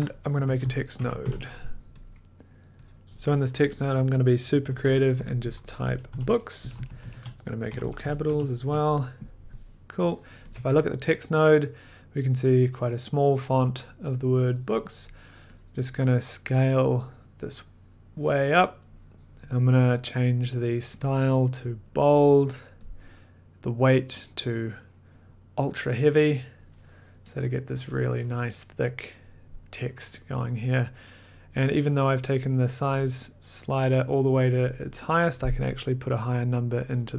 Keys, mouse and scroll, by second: 0.2-1.7 typing, 2.0 click, 2.9 click, 4.4-8.7 typing, 4.4 click, 10.3-11.0 typing, 10.5 click, 15.6 click, 18.4 click, 21.1 click, 21.9 click, 22.9 click, 25.9 click, 30.0 click, 35.3 click, 36.0 click, 36.5 click.